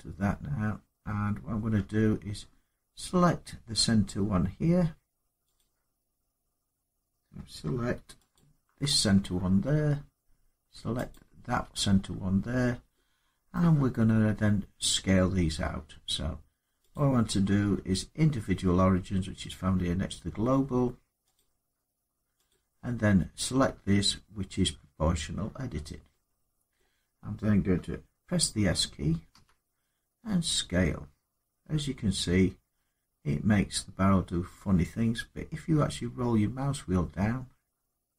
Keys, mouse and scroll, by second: 1.6 scroll, 5.4 click, 8.1 alt+click, 8.8-9.5 scroll down 3, 10.9 click, 11.7 scroll down 2, 13.1 scroll, 13.3 middle click, 13.8 scroll, 16.7 click, 21.1 click, 22.3 click, 26.6 middle click, 29.1 s, 35.1-36.0 scroll up 3, 36.0-36.5 scroll up 2, 36.6 scroll up 4, 37.1 middle click.